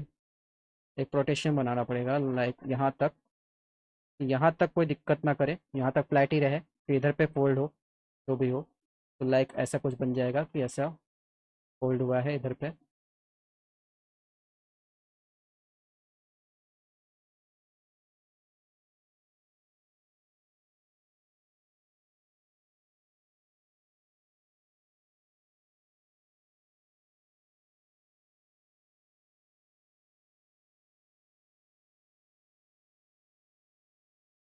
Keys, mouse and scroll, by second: 0.6 click, 2.0-4.4 drag, 4.6 alt+middle click, 7.6 click, 7.9 click, 8.9 alt+middle click, 9.9 click, 11.1 alt+middle click, 12.9 middle click, 15.5 middle click, 16.4 middle click, 16.8 middle click, 17.1 alt+middle click, 17.7 middle click, 19.5 click, 21.7 click, 22.6 middle click, 23.8 middle click, 24.6 alt+middle click, 25.9 click, 26.7 alt+middle click, 27.3 click, 27.9 scroll down 2, 28.4 click, 30.6 alt+middle click, 32.1 t, 33.1 middle click, 33.5 middle click, 33.8 middle click.